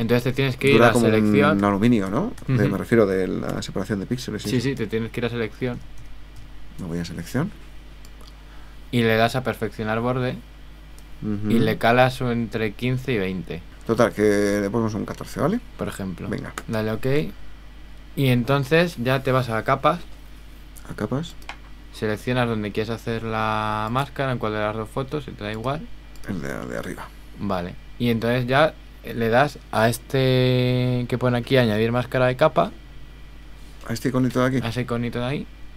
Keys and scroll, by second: 1.6 super++, 3.5 super+h, 5.8 super+-.